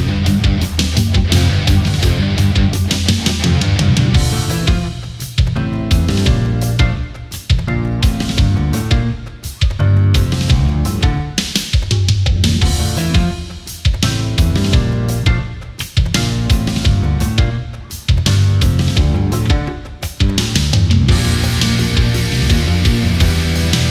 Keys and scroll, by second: 7.0 space, 13.1 ctrl+z.